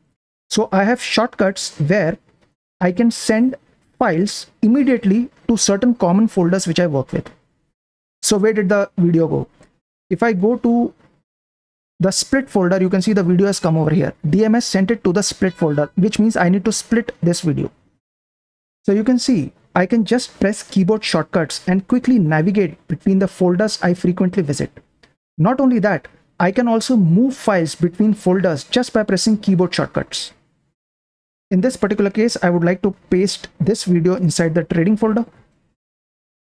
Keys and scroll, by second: 10.1-11.0 typing, 11.4 Up, 11.6 Right, 12.8 shift+g, 18.3 super+Print, 31.0 super+Print, 33.4 d, 33.6 d, 33.9 Up, 34.1 Right, 34.8 p, 34.9 p, 35.3 Left.